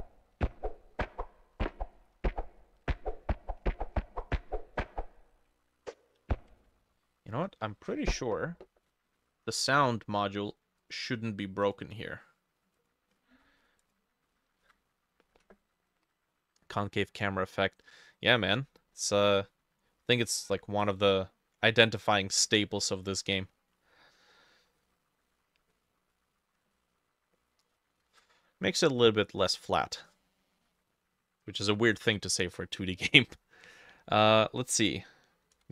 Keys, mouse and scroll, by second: 9.2 middle click, 9.3-11.2 scroll down 1, 13.2-13.8 scroll up 9, 14.7 ctrl+shift+a, 19.0 Escape, 19.9 middle click, 20.0-20.8 scroll down 4, 20.8 middle click, 21.1-21.6 scroll down 1, 21.6 middle click, 22.6 middle click, 23.4 middle click, 24.4 middle click, 24.8 middle click, 25.3 middle click, 25.7 middle click, 26.1 middle click, 26.3-27.4 scroll up 6, 26.8 middle click, 27.4 middle click, 28.1 ctrl+shift+a, 35.3-35.7 typing.